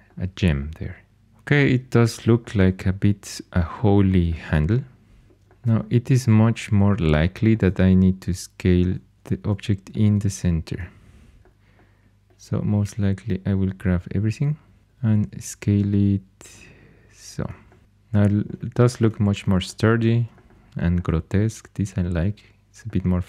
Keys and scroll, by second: 14.8 s.